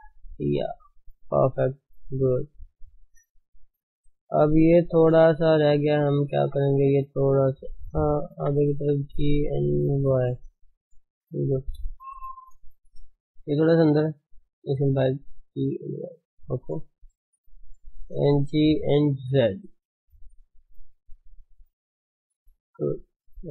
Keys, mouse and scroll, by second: 1.4-1.9 scroll down 7, 2.0 click, 2.3 middle click, 2.7 scroll down 1, 2.8 s, 3.0-4.3 scroll up 7, 3.4-4.8 shift+middle drag, 4.3 click, 5.1 Tab, 5.7 middle click, 6.3 scroll up 1, 6.6 shift+middle click, 7.5 click, 8.4 g, 10.3 Tab, 10.6 middle click, 11.0 ctrl+s, 11.3 middle click, 11.5 Tab, 11.9 shift+middle click, 12.6 scroll up 2, 12.8-14.0 shift+middle drag, 14.0 click, 14.7 g, 16.7 g, 17.5 click, 22.0 scroll down 1, 22.1-23.5 middle drag.